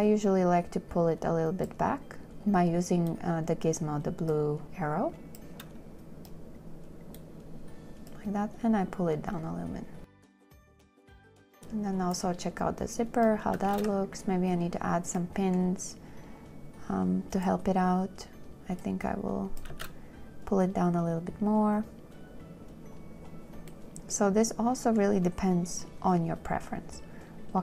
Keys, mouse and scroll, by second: 14.0 2, 20.0 space.